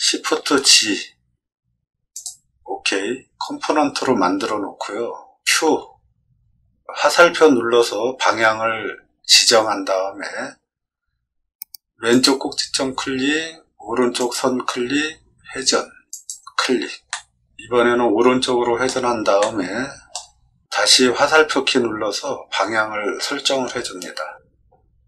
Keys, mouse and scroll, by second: 0.4 shift+g, 2.1 click, 5.6 q, 12.0 click, 14.1 click, 16.1 click, 17.1-18.8 middle drag, 19.4 shift+middle click.